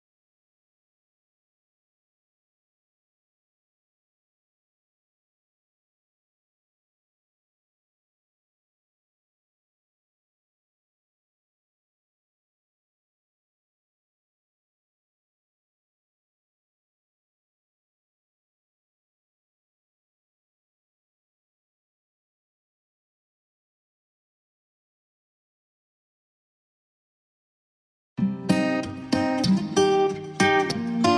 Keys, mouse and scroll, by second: 2.3 shift+Page_Up, 3.7 click, 5.6 c, 6.3-17.8 drag, 18.3-20.8 drag, 20.8-25.5 ctrl+drag, 28.5 F3, 29.3 click, 30.9 shift+F2.